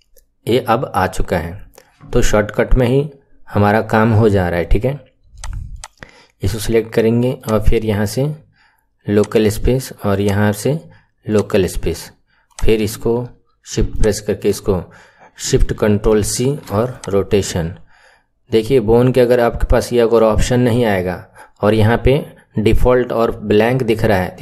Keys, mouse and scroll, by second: 5.8 click, 7.3-12.5 drag, 13.8 shift+click, 16.1 ctrl+shift+c.